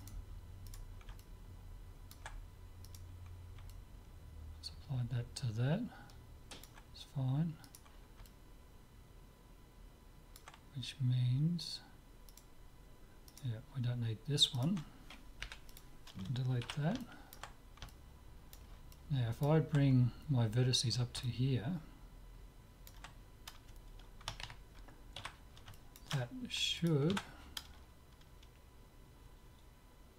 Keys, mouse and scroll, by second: 1.3 click, 1.5 middle click, 2.5 click, 2.7 middle click, 3.1 right click, 4.6 click, 4.8-5.8 middle drag, 7.7-9.5 right drag, 8.3-9.7 drag, 9.7 middle click, 12.3-16.3 right drag, 15.5 Delete, 16.7 z, 17.1-20.7 middle drag, 21.3-23.2 middle drag, 25.3 z, 25.8-28.4 middle drag, 26.8 click, 27.2 Tab, 28.4 right click.